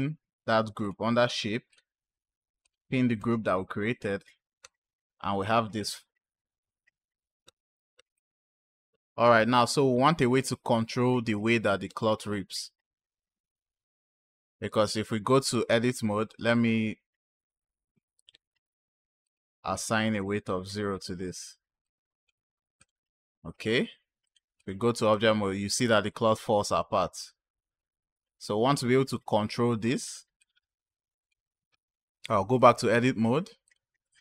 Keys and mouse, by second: 0.7 click, 1.6 click, 2.5 click, 4.5 space, 6.8-9.8 typing, 8.0 click, 11.7 space, 12.2 click, 14.2-14.9 drag, 19.1 click, 21.7-22.2 drag, 22.6 click, 24.1-24.5 drag, 25.0 space, 29.9 space, 30.2 click, 32.4-33.6 drag.